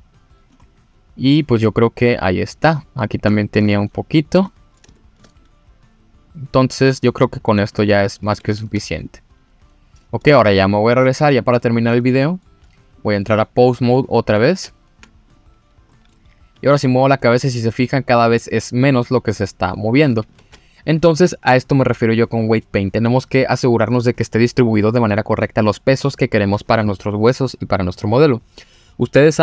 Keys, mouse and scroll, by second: 0.6 middle click, 1.4 click, 2.7-3.2 scroll up 2, 3.3 shift+middle click, 3.7 click, 4.4 middle click, 4.9 shift+middle click, 5.4 click, 8.0-8.3 scroll down 2, 8.4 ctrl+z, 9.0 click, 10.9-11.4 drag, 12.0-12.4 middle drag, 12.6-13.0 scroll up 1, 13.0 middle click, 13.3 click, 13.8 click, 14.5 ctrl+Tab, 15.3 click, 15.9 middle drag, 16.6 g, 19.9 click, 20.4 ctrl+z.